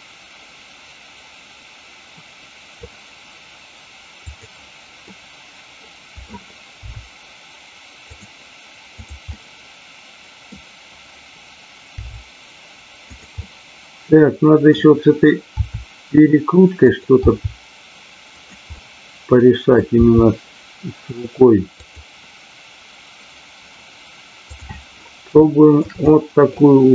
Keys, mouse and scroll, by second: 4.3 click, 5.0-6.2 middle drag, 6.9 r, 8.2 click, 9.3-10.5 middle drag, 13.0 click, 13.0 g, 13.4-14.7 middle drag, 16.8 click, 17.1 g, 18.4 click, 18.6-19.8 middle drag, 21.8 click, 21.8 g, 24.4 click, 25.4-25.8 shift+middle drag, 26.0-26.5 middle drag.